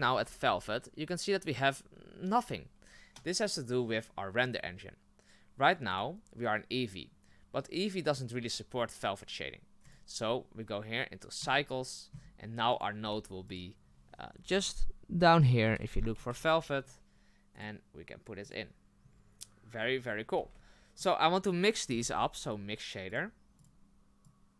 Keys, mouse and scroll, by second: 11.5-23.6 drag, 24.2 click.